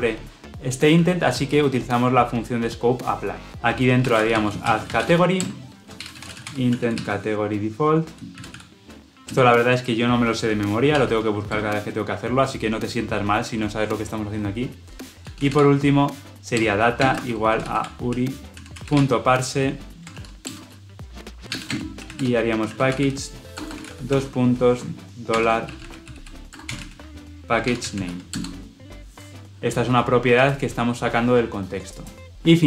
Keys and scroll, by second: 5.3 Return, 9.2 Return, 16.4 Return, 28.2 Return.